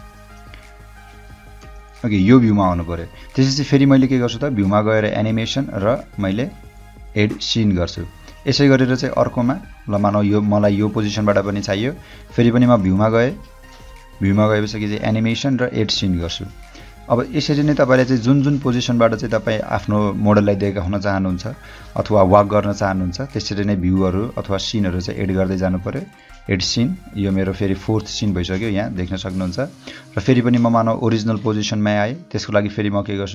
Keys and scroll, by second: 1.6 space, 8.1 o, 16.9 o, 21.4 h.